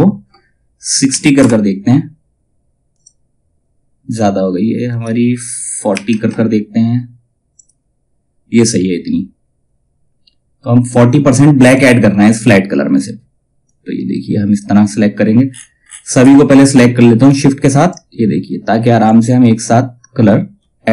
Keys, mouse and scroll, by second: 2.5 click, 7.1 click, 11.2 click, 11.7-13.2 scroll down 1, 13.2-15.0 drag, 15.0 ctrl+scroll down 1, 16.8-20.9 drag.